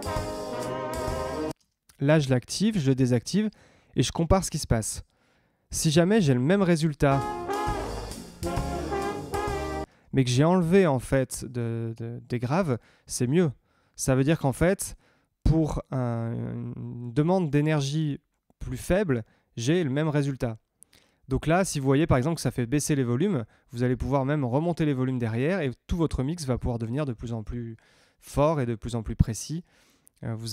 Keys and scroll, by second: 1.5 space, 7.0 space, 9.8 space.